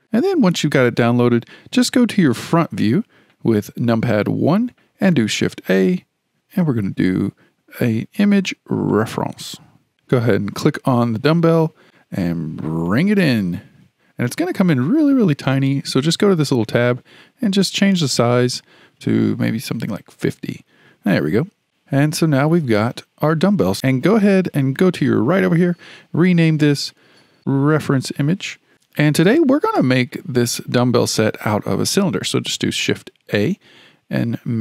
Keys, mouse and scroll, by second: 2.4 KP_1, 5.5 shift+a, 16.5 click, 18.1-21.1 drag, 21.9-22.9 scroll up 4, 22.9-23.7 scroll up 1, 25.4 click, 25.6-28.7 drag, 32.5 shift+a.